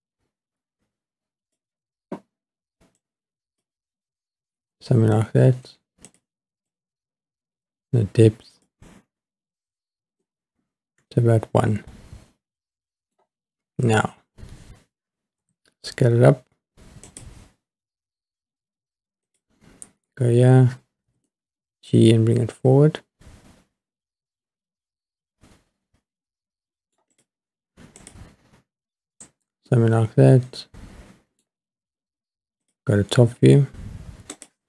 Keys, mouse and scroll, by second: 3.0-6.1 drag, 6.7-8.8 drag, 10.2-13.2 middle drag, 15.4 s, 17.1 click, 19.2 click, 21.1 g, 21.2 middle click, 27.1 click, 28.0 click, 29.7-31.4 middle drag, 32.6 click, 33.2-34.3 scroll down 4, 34.3 click.